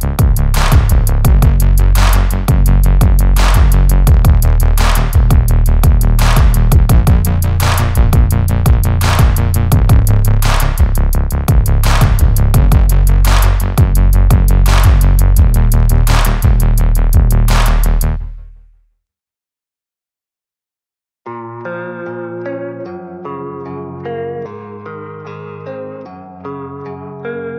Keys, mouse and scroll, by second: 0.0 click, 0.6 Tab, 0.8 alt+a, 2.8 shift+right click, 3.8 click, 3.9 s, 4.6 scroll up 5, 4.8 click, 5.1 Tab, 5.5 x, 5.5 Tab, 5.7 s, 6.8 ctrl+a, 7.0 click, 7.0-7.5 shift+right drag, 7.5-7.8 drag, 7.8 s, 8.3 s, 8.7 s, 8.9 shift+right click, 9.4 m, 10.1 shift+right click, 10.8 click, 11.0 s, 11.3 s, 11.5 shift+right click, 11.9 ctrl+a, 11.9 s, 12.2 ctrl+a, 12.3 shift+click, 12.5 m, 13.4 click, 14.2 alt+a, 14.9 click, 15.6 shift+right drag, 16.3 shift+right click, 17.2 shift+Right, 17.3 shift+Right, 17.4 right click, 17.5 shift+Right, 17.6 shift+Right, 17.7 shift+Right, 17.8 right click, 17.9 shift+Right, 18.2 shift+Right, 18.4 alt+a, 18.7 shift+Right, 18.7-19.0 right drag, 18.8-22.2 shift+Right, 19.5 shift+right click, 20.3 shift+right click, 20.8 right click, 21.8 right drag, 22.4 alt+a, 26.1 scroll up 1, 26.2 scroll down 1, 26.7 click, 27.4 click.